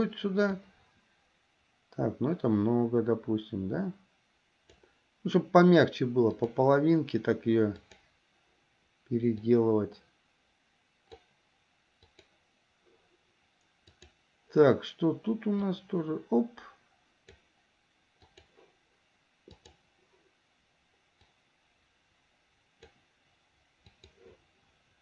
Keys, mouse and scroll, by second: 0.8-5.0 drag, 6.5 click, 8.0 click, 9.4-11.3 drag, 12.3 click, 14.2 click, 15.9-17.7 drag, 18.5 click, 19.7 click, 21.5-23.3 drag, 24.1 click.